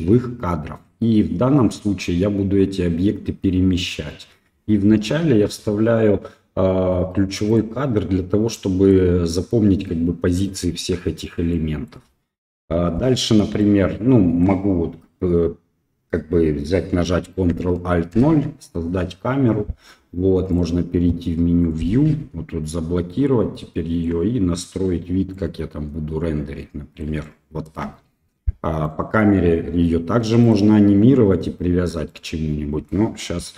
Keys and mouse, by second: 8.5-8.9 middle drag, 11.5 middle click, 12.5 KP_1, 13.6-14.4 shift+middle drag, 18.1 ctrl+alt+KP_0, 21.6 click, 23.1-24.0 shift+middle drag, 25.3-27.0 middle drag, 27.2 shift+middle click, 28.8 click, 30.4 right click, 32.1-32.9 middle drag, 33.3 KP_1.